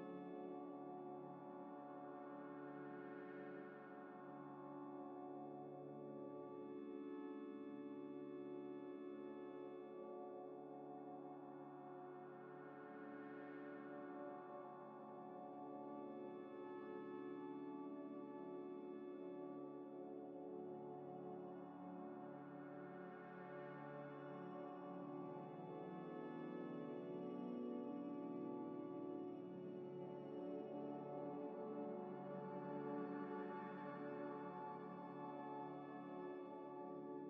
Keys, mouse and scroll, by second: 0.4 double click, 1.9 u, 2.6 u, 5.6 middle click, 6.5 g, 6.6 y, 6.9 g, 7.4 g, 8.9 ctrl+z, 9.4 g, 10.1 scroll up 1, 10.4 middle click, 10.7 Tab, 10.9 Tab, 11.0 Tab, 11.4 ctrl+z, 11.5 ctrl+z, 11.6 ctrl+z, 11.9 ctrl+z, 12.4 ctrl+z, 14.4 s, 15.1 x, 16.3 Tab, 16.7 middle click, 18.0 Tab, 18.5 3, 19.7 middle click, 20.1 shift+click, 20.5 shift+click, 22.0 shift+click, 23.8 scroll down 1, 24.6 shift+click, 26.8 shift+click, 28.3 middle click, 30.5 shift+click, 33.1 shift+click, 36.5 scroll up 1.